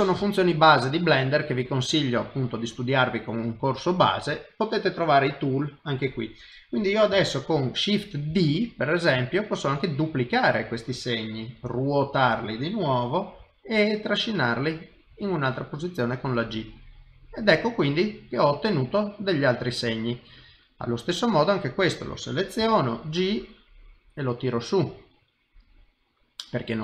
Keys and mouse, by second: 0.2 shift+middle click, 8.3 shift+d, 11.6 r, 13.4 g, 15.6 middle click, 18.2 middle click, 19.7 shift+middle click, 21.0 click, 21.5 middle click, 22.6 g, 24.9 middle click.